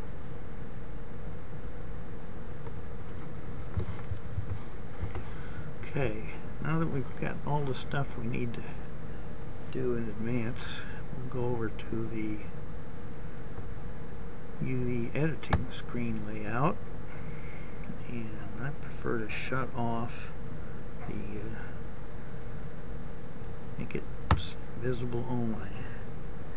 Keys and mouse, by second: 13.4 middle click.